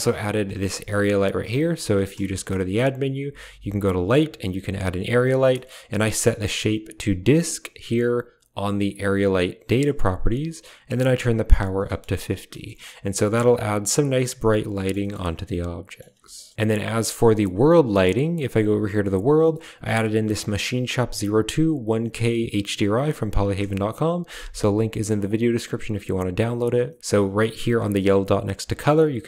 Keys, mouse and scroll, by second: 0.3 drag, 0.3 typing, 1.5 g, 2.1 shift+a, 5.4 click, 6.2-7.7 drag, 11.8 click, 12.6 z, 14.0 click, 14.9-15.8 shift+middle drag, 17.5 click, 19.6-25.1 drag.